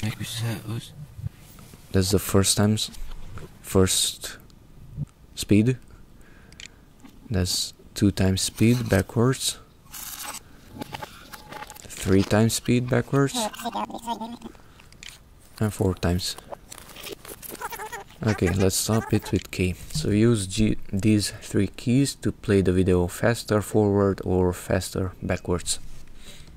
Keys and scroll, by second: 6.2 j, 6.8 j, 11.7 j, 14.8 j, 18.4-22.9 typing, 24.6 j, 25.2 j.